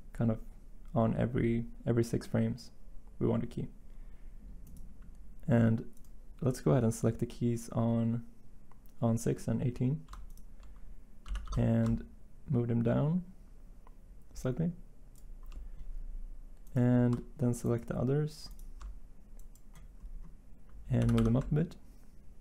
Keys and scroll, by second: 11.2 g, 11.5 y, 20.9 g, 21.1 y.